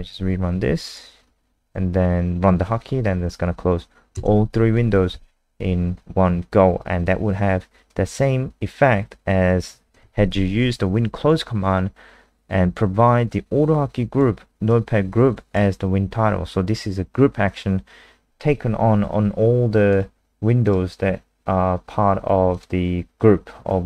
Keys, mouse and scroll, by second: 4.1 KP_0, 7.9 click, 21.9 scroll down 2, 22.5 click, 23.5 scroll down 1.